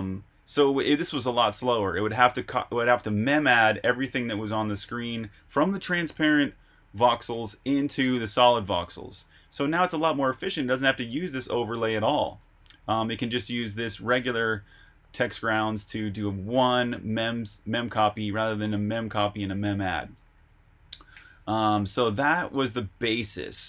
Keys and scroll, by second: 0.0-0.3 typing, 1.9 j, 8.8 Escape, 9.0-11.7 typing, 13.0 j, 20.1 Escape, 20.3-21.7 typing, 22.0 super+Tab.